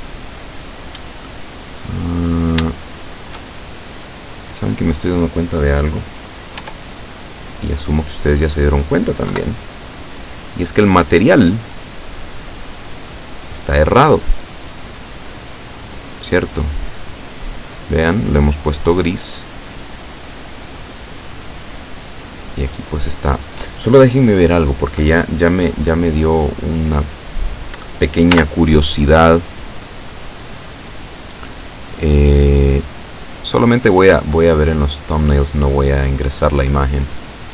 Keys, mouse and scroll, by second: 2.2-2.7 scroll up 2, 3.1 shift+click, 4.0-5.5 drag, 6.7 Tab, 7.3-8.9 drag, 9.4 KP_7, 12.9-13.3 scroll down 1, 15.6-15.9 scroll up 1, 16.2 scroll up 1, 16.5-18.2 drag, 19.0 scroll down 1, 19.5-22.0 drag, 22.2-22.6 scroll up 1, 28.4 n, 29.8 click, 31.1-31.4 scroll down 1, 32.2-32.5 scroll down 1, 33.0 click, 35.1 click, 37.2 click.